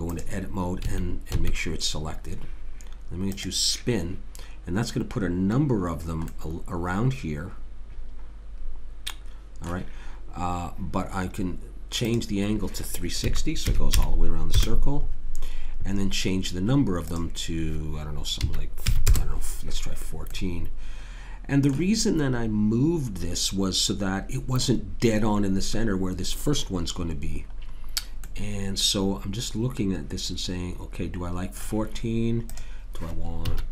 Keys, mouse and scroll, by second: 0.8 a, 1.3 a, 3.3-4.4 drag, 6.3 middle click, 7.1 middle click, 12.1 click, 17.1 click, 20.3-22.3 middle drag, 28.2-30.1 middle drag, 32.5 click.